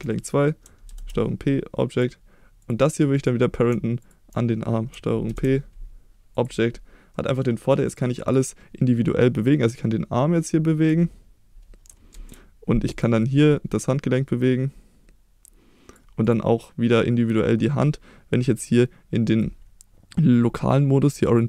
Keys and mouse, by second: 0.8 ctrl+p, 3.1 click, 4.0 shift+click, 5.2 ctrl+p, 7.1 middle drag, 7.9 click, 8.2 click, 9.5-10.9 drag, 12.1 ctrl+z, 12.9 click, 13.2-13.5 middle drag, 14.3-15.9 drag, 16.2 click, 21.2-21.4 drag.